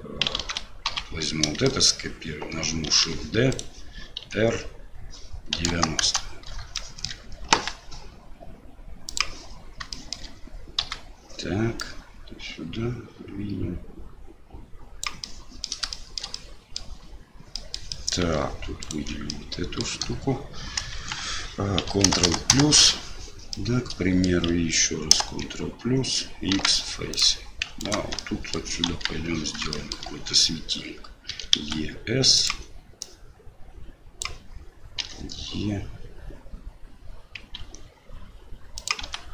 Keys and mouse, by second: 0.4 alt+a, 0.9 l, 1.7 shift+click, 2.9 shift+d, 4.2 r, 6.9 shift+middle click, 7.5 g, 10.0 shift+middle click, 10.8 KP_7, 11.9-15.0 drag, 15.4 middle click, 16.0 shift+middle click, 16.3 middle click, 17.6 middle click, 18.0 middle click, 18.8 alt+middle click, 19.3 middle click, 20.9 KP_1, 22.1 ctrl+KP_Add, 23.5 middle click, 26.5 x, 27.8 alt+click, 28.2 middle click, 28.9 KP_1, 29.7 shift+middle click, 31.3 e, 33.0-34.2 drag.